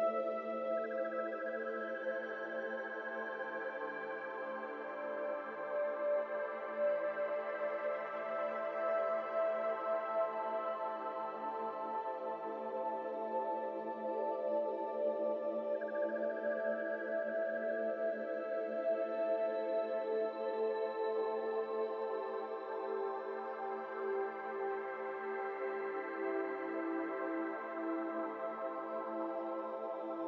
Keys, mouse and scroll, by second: 0.2 scroll up 2, 0.8-1.2 middle drag, 1.2 click, 1.5 Tab, 1.6 middle click, 1.9 alt+z, 2.2 middle click, 2.6 2, 2.9 alt+click, 4.3 z, 5.2 s, 6.5 z, 6.6 z, 6.6 z, 6.9 middle click, 7.3 Tab, 7.4 middle click, 8.3 ctrl+s, 9.2 click, 10.5 click, 11.1 middle click, 11.3 scroll up 1, 14.8 click, 19.4 middle click, 19.9 click, 20.8 middle click, 21.6-22.9 drag, 22.9 KP_2, 23.6 KP_2, 24.9-26.2 middle drag, 26.2 drag, 30.0-30.2 scroll down 3.